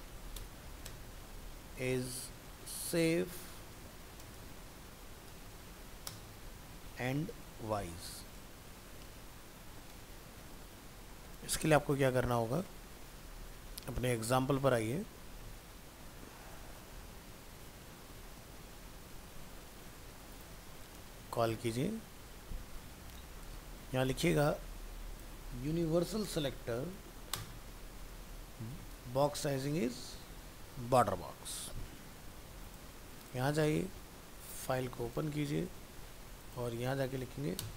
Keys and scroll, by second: 9.7 ctrl+s, 18.5 ctrl+c, 21.5 ctrl+v, 29.7 ctrl+s, 33.8 alt+f, 35.7 ctrl+Tab, 37.6 ctrl+shift+Left.